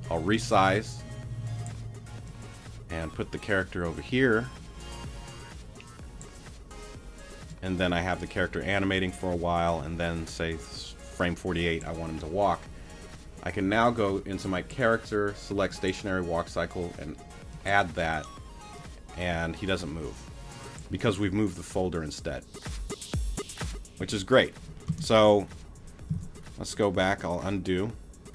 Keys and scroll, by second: 20.9 space, 24.9 space, 26.1 super+z.